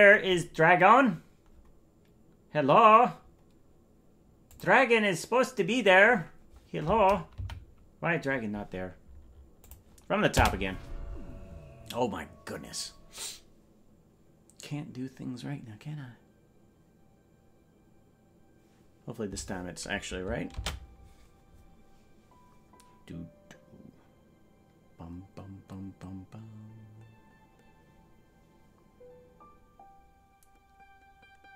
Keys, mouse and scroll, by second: 0.9 scroll down 1, 1.0-2.8 scroll up 1, 2.8-3.1 scroll down 8, 5.0 click, 7.5 Right, 9.6 click, 10.3 space.